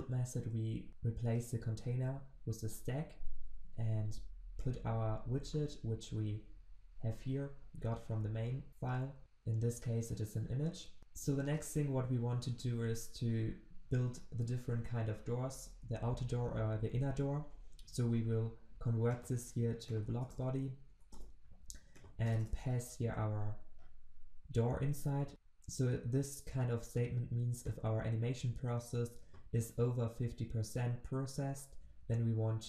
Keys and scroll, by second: 0.4 ctrl+v, 1.8 ctrl+shift+\, 11.0 ctrl+z, 20.2 alt+Return, 23.0 ctrl+v.